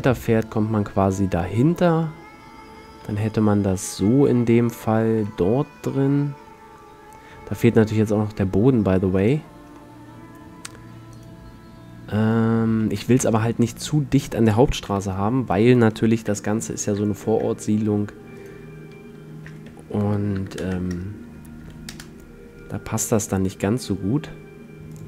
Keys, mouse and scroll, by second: 1.3 middle click, 1.4-3.1 middle drag, 3.1 a, 3.4-3.8 drag, 6.5-8.0 middle drag, 9.9-11.2 right drag, 11.2-13.2 middle drag, 12.8 a, 14.0-15.1 middle drag, 15.1 KP_7, 15.2 middle click, 16.3 KP_5, 19.6 r, 20.3 click, 23.2 g.